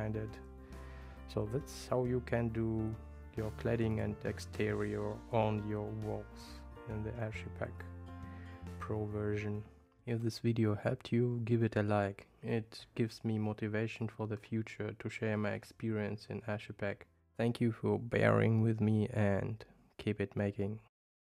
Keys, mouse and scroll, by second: 3.9 click.